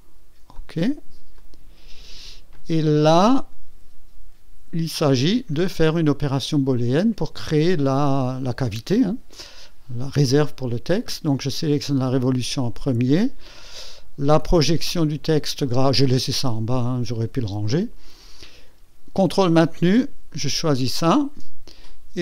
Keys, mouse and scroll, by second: 0.5 click, 1.4 click, 2.5 click, 4.6 scroll down 1, 5.8-6.2 scroll up 1, 6.2 click, 7.9 click, 20.3 ctrl+click.